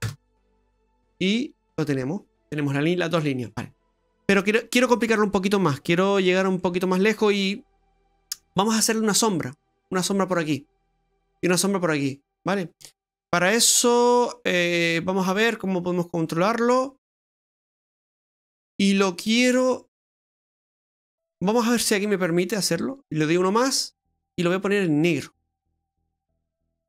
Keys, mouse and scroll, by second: 2.9-3.5 scroll down 5, 3.5 middle click, 6.3-6.6 scroll down 2, 6.6 middle click, 7.8-8.5 scroll up 6, 8.5 middle click, 10.7 middle click, 13.1-14.1 scroll up 5, 14.8-15.4 scroll down 4, 15.4 middle click, 21.9-22.3 scroll up 2, 23.1 click, 24.4 click, 25.2 click.